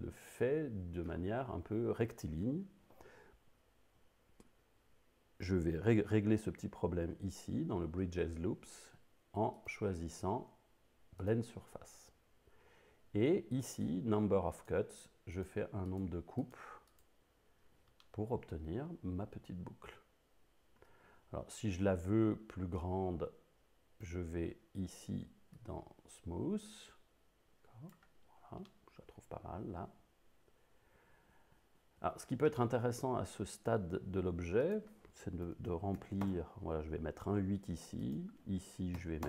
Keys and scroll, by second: 35.5 1, 35.8 ., 36.0 8, 36.3 Return, 39.0 6.